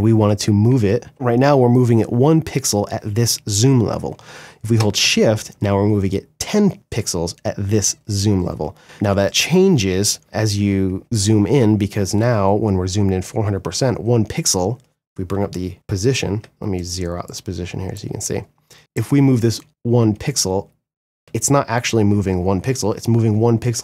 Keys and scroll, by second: 0.3 Left, 0.8 Right, 1.0 Left, 4.1 shift+Right, 4.5 shift+Left, 4.8 shift+Right, 5.0 shift+Left, 8.1 space, 9.8 Right, 9.9 Left, 10.6 Right, 10.8 Left, 14.5 p, 15.7 Right, 18.3 space, 18.9 Left, 19.7 Right, 19.8 Left, 20.3 Right.